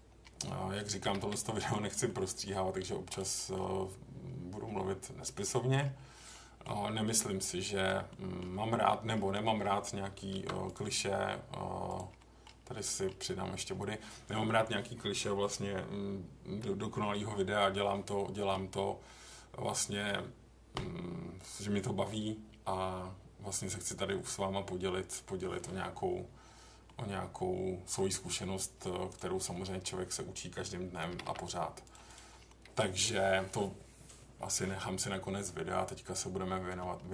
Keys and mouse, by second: 0.4 middle click, 1.0 g, 1.2 g, 2.0 middle click, 3.3 middle click, 5.4 middle click, 6.3 middle click, 8.1 middle click, 8.8 middle click, 10.3 ctrl+r, 11.9 click, 12.2 middle click, 12.8 middle click, 26.8-27.9 middle drag, 29.5 middle click, 31.1 g, 31.2 g, 31.8 click, 32.1 click, 32.4 middle click.